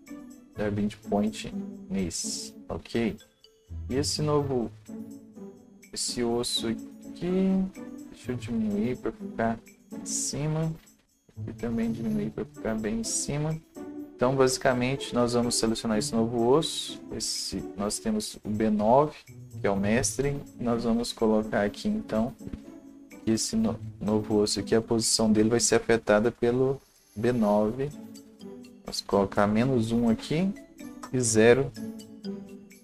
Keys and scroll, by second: 28.4 ctrl+c, 30.0-31.2 typing.